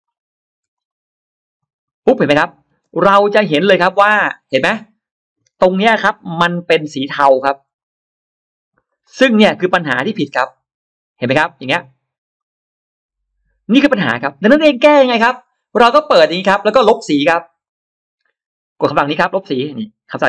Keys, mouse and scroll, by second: 2.4-2.8 scroll down 2, 2.8 space, 3.3 space, 4.2-4.5 scroll down 2, 4.7 scroll up 2, 6.1-6.8 scroll down 5, 7.3 shift+x, 7.6 click, 8.7 right click, 8.9 right click, 9.8 click, 12.2 click, 16.0 click, 17.5 click, 20.2 ctrl+alt+middle click.